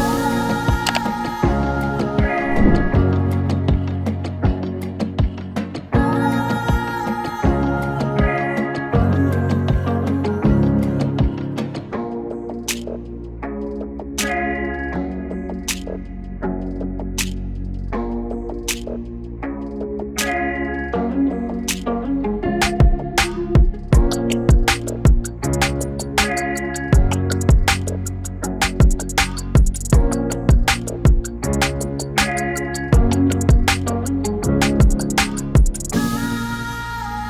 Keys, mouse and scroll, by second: 2.5 click, 4.8-5.5 typing, 5.1-11.3 drag, 13.0 click, 15.4 click, 17.4 click, 18.6 8, 21.3 click, 22.5 shift+click, 26.6 click, 27.2 0, 27.6-37.2 drag.